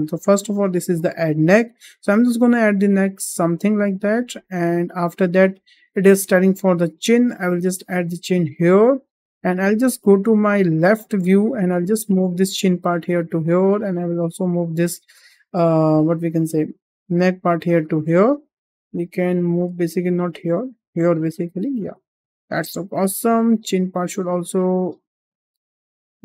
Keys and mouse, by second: 0.4 shift+middle click, 1.6-3.9 drag, 4.8-5.1 shift+middle drag, 6.4 shift+middle drag, 7.4-9.4 drag, 9.8 `, 11.9 g, 13.8-14.1 drag, 14.9 g, 16.5 click, 17.0 g, 19.2 shift+middle drag, 20.1 g, 23.4 click, 23.8 g, 25.2 drag.